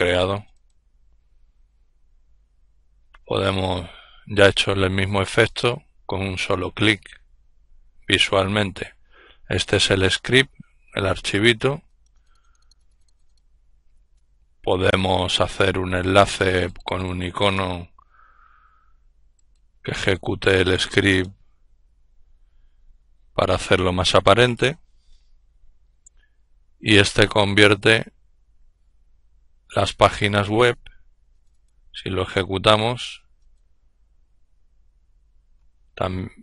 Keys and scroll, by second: 36.2-36.4 typing.